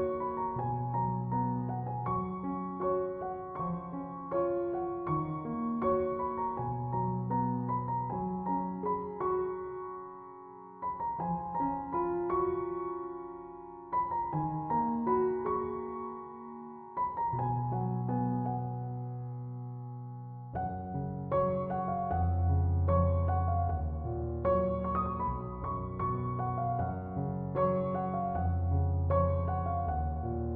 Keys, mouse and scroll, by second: 1.0-18.8 alt+drag, 18.8-20.7 drag, 22.8 alt+scroll up 1, 23.6 space, 25.2 alt+scroll down 1, 26.5-30.5 drag.